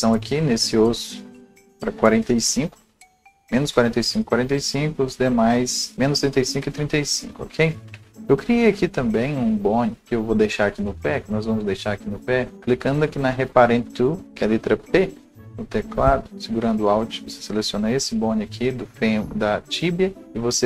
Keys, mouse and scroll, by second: 10.0 click, 10.0 right click, 10.0-10.8 scroll up 1, 10.8 click, 12.5-20.6 right drag.